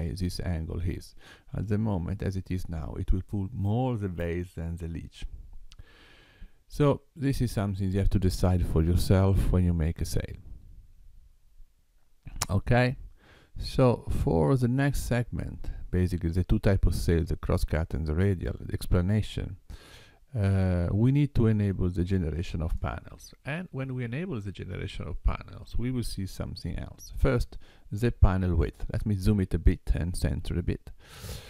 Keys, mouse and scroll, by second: 13.9 click, 23.3 click, 25.0 click.